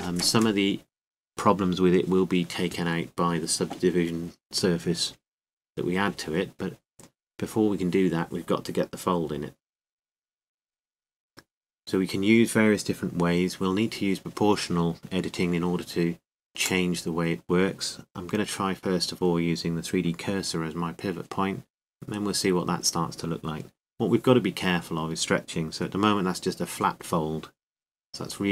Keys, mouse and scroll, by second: 1.8 KP_7, 2.3 a, 3.8 b, 9.2-12.0 middle drag, 16.3-18.3 drag, 17.5 middle click, 17.7 right click, 18.3 middle click, 19.8-21.4 drag, 24.0 r.